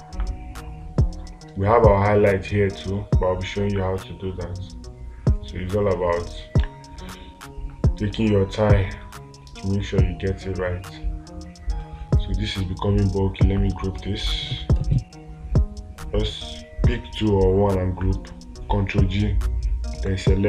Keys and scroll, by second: 7.1 space.